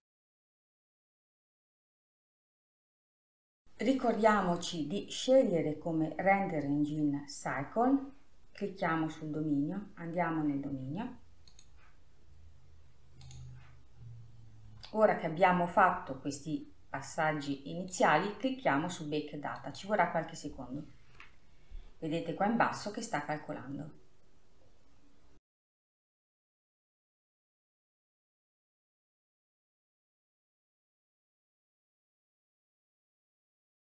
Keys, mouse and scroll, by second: 0.0 click, 1.8 click, 2.5-2.8 scroll down 3, 3.5 middle click, 3.7 click, 18.5-33.9 drag.